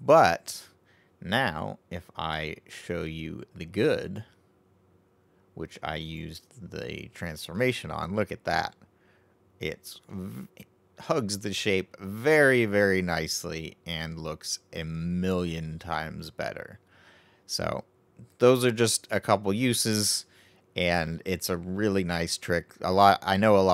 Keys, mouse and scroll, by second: 4.3 click, 6.3 click, 7.5-8.6 middle drag, 8.6-9.3 scroll up 3, 9.3-10.0 scroll down 1, 10.0-13.0 middle drag, 13.8-14.7 scroll down 1, 14.7-17.7 middle drag, 22.4-23.7 middle drag.